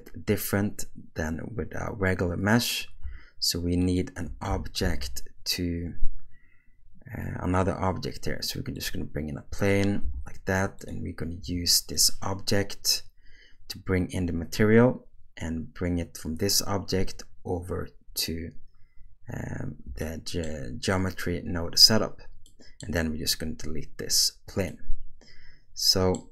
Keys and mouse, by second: 3.9 shift+right click, 4.8 shift+a, 10.0 g, 11.4 r, 20.0-20.4 shift+middle drag, 22.5 middle click, 24.7-26.1 middle drag.